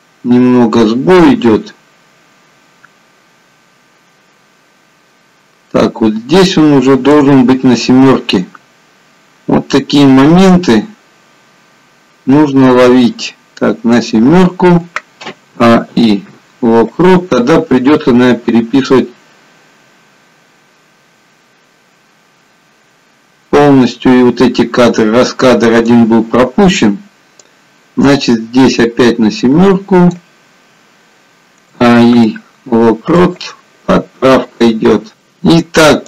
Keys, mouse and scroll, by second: 9.0-9.4 scroll up 2, 18.7 click, 27.7 click.